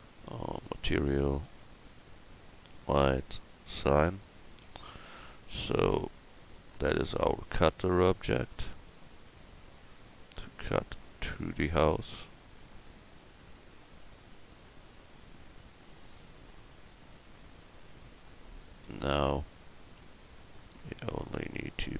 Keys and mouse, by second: 4.6 Tab, 18.9 KP_1.